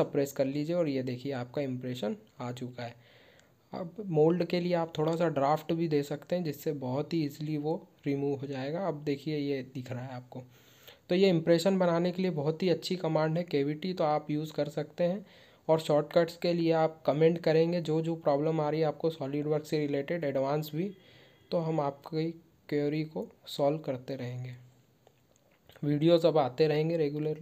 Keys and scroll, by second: 10.1 ctrl+q, 10.3 shift+Tab, 12.3 shift+Tab, 13.6 shift+Tab, 13.9 shift+Tab.